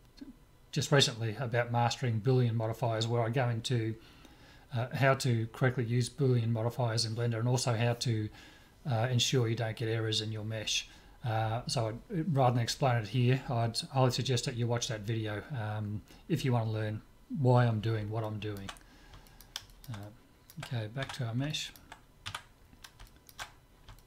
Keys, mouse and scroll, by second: 18.2-22.2 middle drag, 21.0 Tab, 22.2 Tab, 22.8-24.0 middle drag.